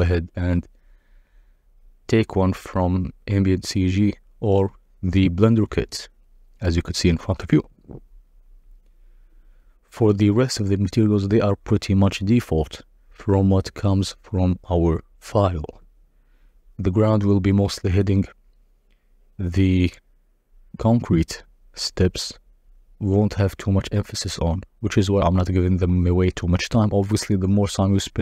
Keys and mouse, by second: 0.6 click, 10.4-10.8 drag, 16.9 click, 22.0 z, 22.9 drag, 24.3-25.7 drag, 25.3 0, 26.5-28.0 drag, 27.5 0, 27.6 0.